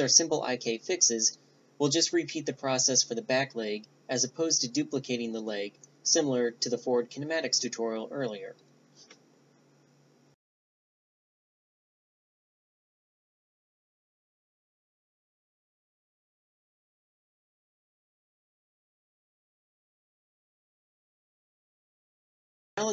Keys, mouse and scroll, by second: 1.7-2.5 drag, 2.8-3.5 drag, 3.3 g, 5.7 middle click, 7.6 Tab, 7.8 right click, 8.3 middle click, 8.8 shift+d, 9.1 ctrl+alt+s, 10.1 alt+p, 10.5 middle click, 10.6 Tab, 10.8 right click, 11.1 shift+i, 11.4 click, 11.8 right click, 12.1 drag, 12.3-12.8 right drag, 13.0 click, 13.8-14.4 drag, 13.9 ., 13.9 1, 14.0 7, 14.8 click, 15.2 right click, 15.3-15.6 drag, 16.1 click, 17.1 click, 19.8 click, 20.4 right click, 20.5 click, 20.7 BackSpace, 20.7 BackSpace, 21.5 right click, 21.8 r, 22.0 g, 22.5 click.